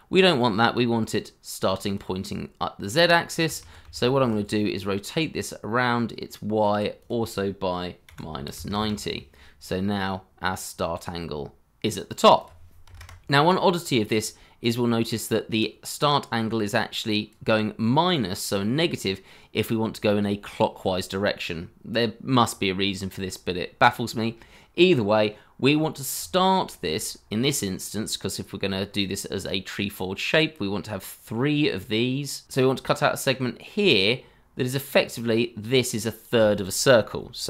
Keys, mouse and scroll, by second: 5.2 ctrl+z, 8.0 -, 8.3 9, 8.5 0, 8.7 Return, 12.8 0, 12.9 Return, 19.2 scroll up 1, 21.1-22.2 scroll down 1, 25.8-26.5 scroll down 1, 26.6 shift+middle click, 27.1 scroll up 1, 32.4 ctrl+z.